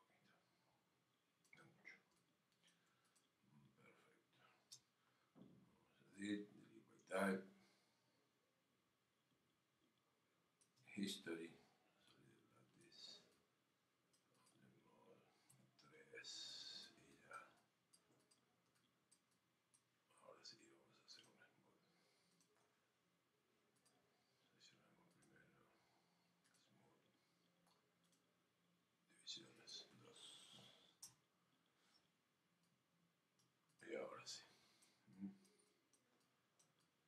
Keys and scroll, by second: 31.0 Return.